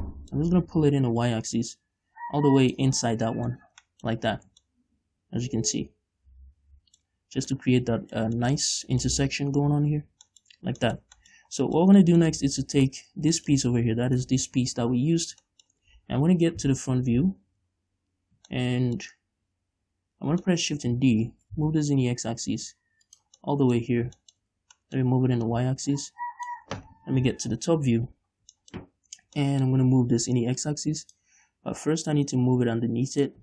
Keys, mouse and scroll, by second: 1.6-3.4 drag, 3.4-4.7 middle drag, 4.0 Tab, 4.6 scroll down 2, 4.7 a, 5.1-12.3 middle drag, 9.0 scroll up 2, 9.9 Tab, 11.0 scroll down 2, 11.9 scroll down 2, 12.7 scroll up 1, 13.2 right click, 13.4 Tab, 13.9 middle click, 13.9 scroll up 1, 14.5 right click, 15.6 scroll down 2, 15.9-23.6 shift+middle drag, 17.1 ctrl+KP_1, 17.9 KP_5, 21.7 shift+d, 23.6 shift+click, 23.8-25.9 middle drag, 24.3-24.6 scroll up 2, 25.9-27.6 drag, 27.6 KP_7, 28.7-29.8 scroll up 4, 28.9 shift+middle click, 29.8-31.0 shift+middle drag, 31.0-33.4 drag.